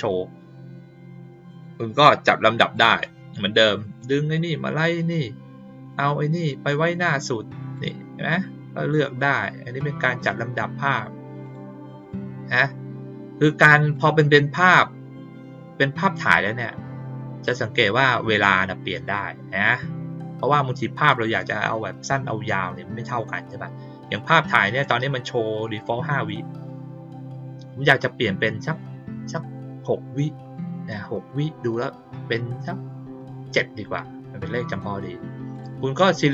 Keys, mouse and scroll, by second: 2.7-3.9 drag, 5.8 click, 7.7 click, 10.8 click, 11.4 click, 11.9 click, 13.9 click, 18.9 click, 35.5 click, 36.1 click.